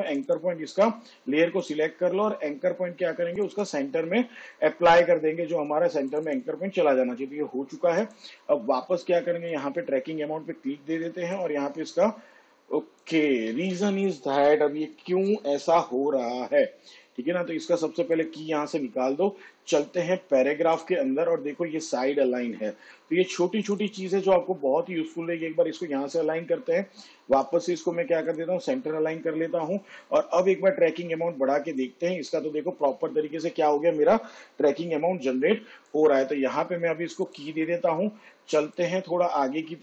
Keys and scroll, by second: 14.4 ctrl+z.